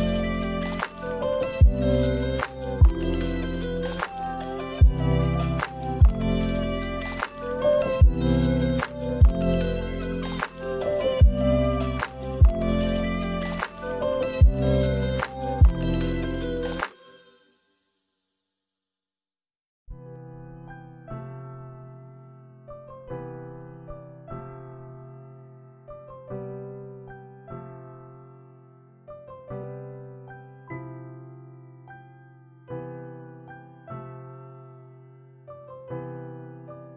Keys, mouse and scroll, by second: 1.1-1.7 scroll down 3, 1.4 middle click, 2.5 shift+a, 7.0 click, 8.1 click, 9.1 middle click, 10.0 click, 12.1 shift+a, 18.9 click, 20.2 click, 21.1 middle click, 22.1 shift+a, 25.5 click, 26.5 middle click, 27.6 click, 28.6 click, 31.3 click, 31.5 click.